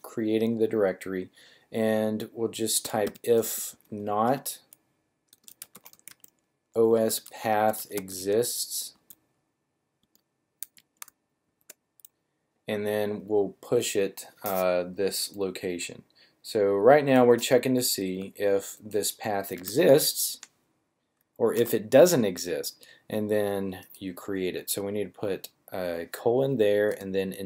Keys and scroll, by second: 2.5-3.9 typing, 5.4-8.8 typing, 9.9-11.4 typing, 18.0 super+c, 19.4 super+v, 21.5 :.